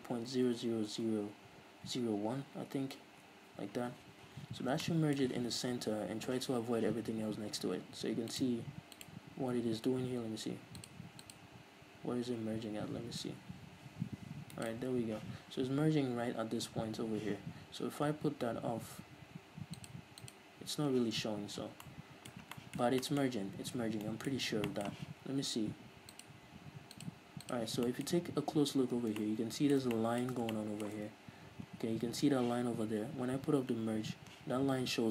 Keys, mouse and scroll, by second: 0.8-5.0 drag, 0.8 KP_0, 3.5 Return, 4.4 z, 4.7 scroll up 1, 5.0-8.6 shift+middle drag, 8.6-14.9 drag, 14.9 shift+right click, 20.0-21.4 drag, 21.4 scroll down 1, 21.7 z, 22.0-26.4 middle drag, 22.6-23.2 scroll down 4, 23.5-24.1 scroll up 2, 24.1 scroll down 2, 24.6 scroll up 2, 26.4-28.0 drag, 28.0-35.1 middle drag, 28.3-29.3 scroll up 2, 29.3 scroll up 1.